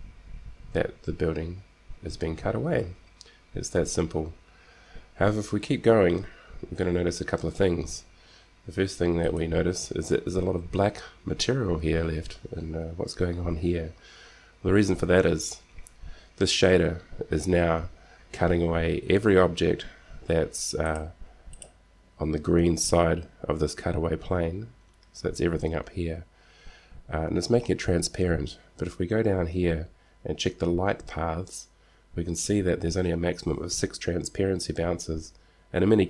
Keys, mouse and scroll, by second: 21.2-23.2 drag.